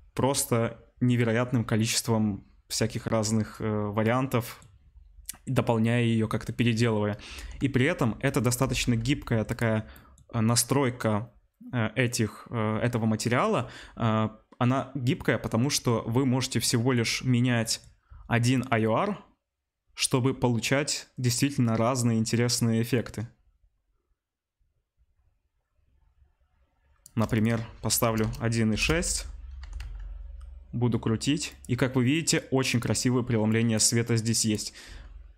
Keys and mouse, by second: 7.3 r, 8.7 r, 18.6-25.0 shift+drag, 25.0-26.6 shift+right drag, 26.6-31.6 shift+drag, 28.2 BackSpace, 29.5 r, 31.6-32.7 middle drag, 32.7 click, 32.9-33.4 middle drag, 33.4-35.3 drag, 34.8 s.